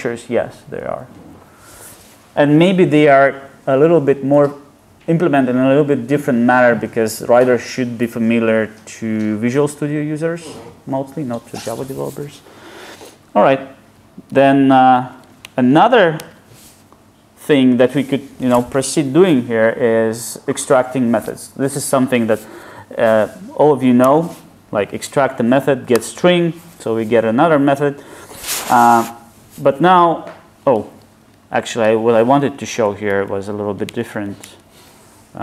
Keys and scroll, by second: 24.4 alt+super+m, 31.4 super+z.